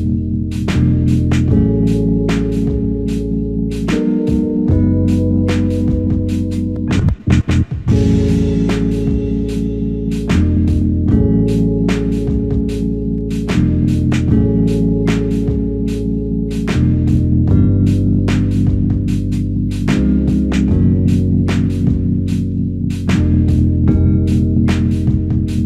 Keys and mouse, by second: 2.7 shift+click, 4.6 ctrl+alt+click, 6.2 double click, 10.6 ctrl+click, 12.8 ctrl+click, 15.5 double click, 16.5 ctrl+alt+click, 17.8 alt+click, 20.5 ctrl+alt+click, 21.4 alt+shift+click, 22.1 alt+click, 23.4-24.3 typing, 25.4 ctrl+alt+click.